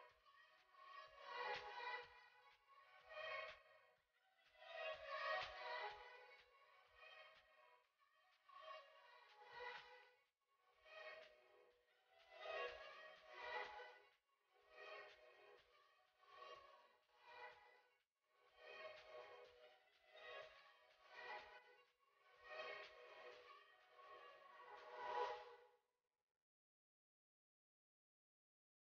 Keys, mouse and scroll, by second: 1.5 scroll up 1, 2.5 click, 5.6 click, 9.9 click, 12.6-15.1 drag, 16.7-17.6 scroll up 1, 17.6 click, 21.7 click, 25.6 click.